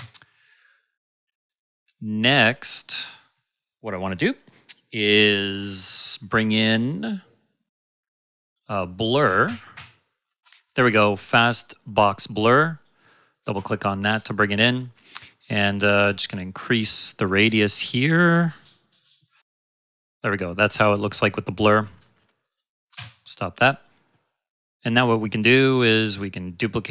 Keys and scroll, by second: 9.0-10.2 typing, 22.9 space.